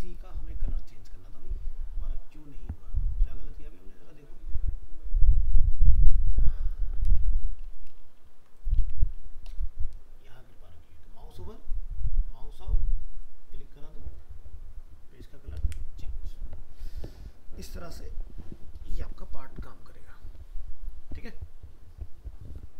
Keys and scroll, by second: 8.0 ctrl+s, 8.8 alt+Tab.